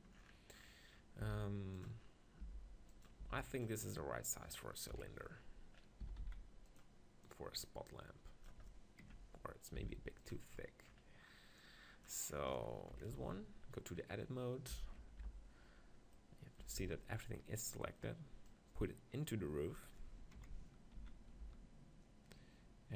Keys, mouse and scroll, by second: 0.7-1.8 middle drag, 1.2 s, 1.8 click, 2.4 g, 3.2 s, 5.1 KP_1, 5.3 click, 6.0 s, 7.3-9.0 drag, 9.0 ctrl+KP_1, 9.8 s, 10.3-13.3 drag, 12.9 KP_7, 13.1 Tab, 13.3-14.9 middle drag, 15.0 ctrl+l, 16.8 z, 18.5-20.3 drag, 20.3 KP_7, 21.0 z, 21.4 g.